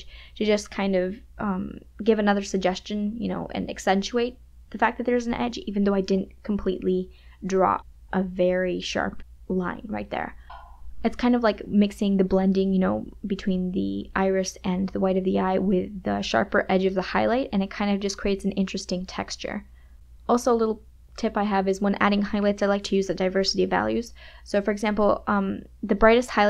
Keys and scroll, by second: 11.4 ].